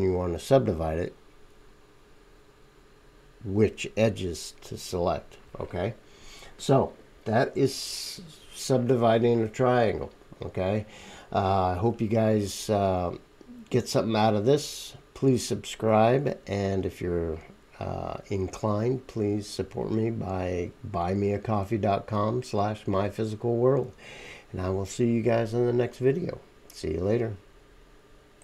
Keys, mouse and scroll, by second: 7.1 click, 7.1 right click.